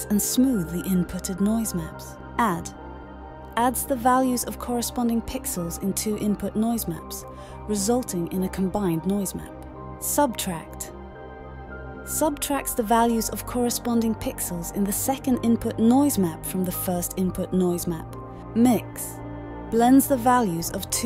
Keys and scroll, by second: 18.6 d.